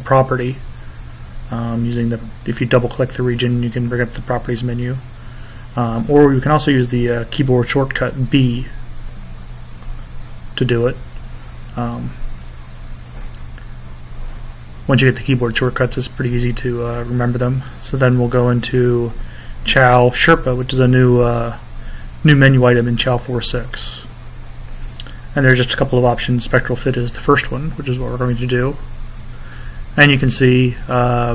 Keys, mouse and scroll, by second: 1.6 click, 3.7 click, 4.7 click, 5.6 click, 6.7 click, 8.0 b, 9.9 click, 11.5 click, 14.3 click, 20.1 click, 21.1-23.5 drag, 25.9 click.